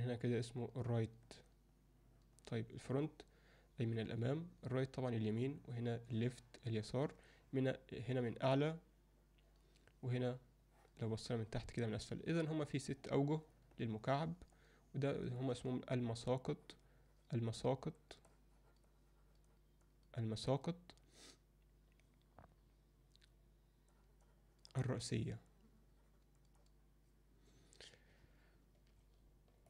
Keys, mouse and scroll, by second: 0.5 click, 1.3 click, 1.7-3.0 drag, 3.9 click, 8.0 click, 8.4 click, 8.8 click, 10.7 click, 11.3 click, 12.0 click, 12.4 click, 14.0 click, 14.5 click, 15.3 click, 16.5 click, 18.0 click, 18.3-19.6 drag, 19.9 click, 20.4 click, 23.9 click, 24.3 click, 24.7 click, 25.1 click, 25.5 click, 26.4 click.